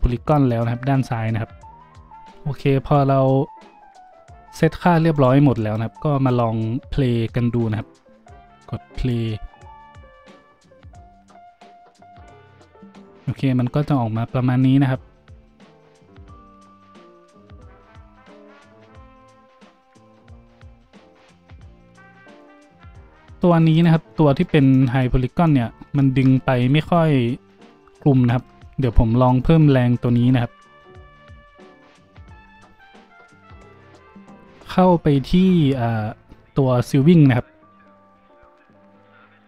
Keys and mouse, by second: 2.6-5.1 drag, 4.7 middle click, 4.7 right click, 5.1 middle click, 5.2-23.7 drag, 23.7 middle click, 23.8-39.4 drag.